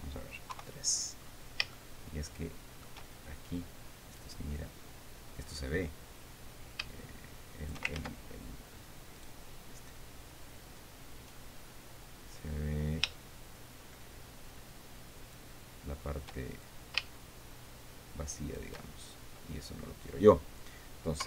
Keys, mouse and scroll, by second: 0.3-0.6 scroll up 1, 1.1 KP_3, 1.7-2.2 scroll up 2, 2.3-3.6 shift+middle drag, 3.8 shift+scroll up 1, 4.7 right click, 7.5 shift+click, 8.5 ctrl+shift+z, 9.7 right click, 11.8 scroll down 2, 13.1-16.1 drag, 17.2-19.3 shift+drag, 19.6 shift+scroll down 3.